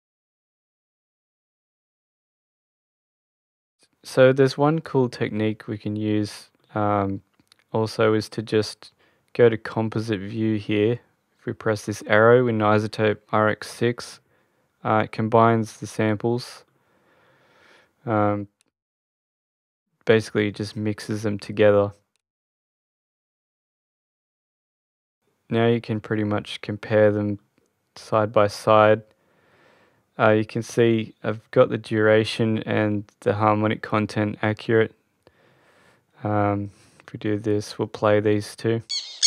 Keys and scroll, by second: 38.7 space.